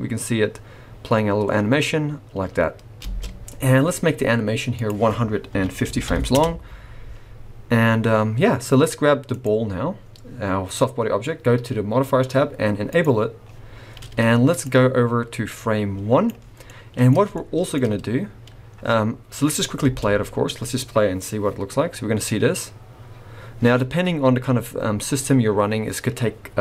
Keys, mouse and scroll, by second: 3.0 space, 4.7 click, 9.3 click, 12.9 click, 14.6 click, 16.6 middle click, 17.3 shift+middle click, 19.8 space.